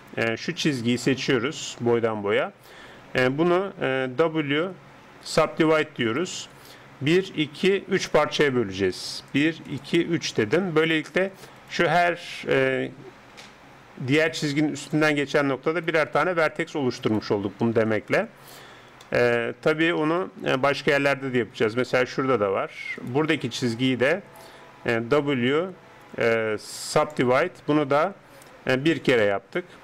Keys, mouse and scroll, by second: 0.0-2.5 middle drag, 0.9 right click, 4.3 w, 6.0 w, 9.3-11.6 drag, 11.6 right click, 13.3 g, 15.7-18.5 right drag, 19.1-21.8 middle drag, 21.8-24.6 right drag, 27.1 w, 29.3 right click.